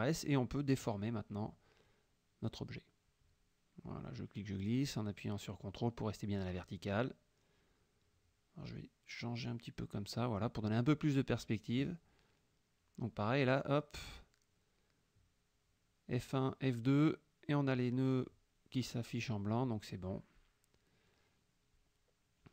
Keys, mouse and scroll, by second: 4.5-8.0 drag, 9.5-12.3 drag, 15.1 F1, 15.5 click, 16.1 F2, 17.1-19.5 drag, 19.9 F1, 20.2 click, 20.8-21.4 drag, 21.4-22.5 middle drag.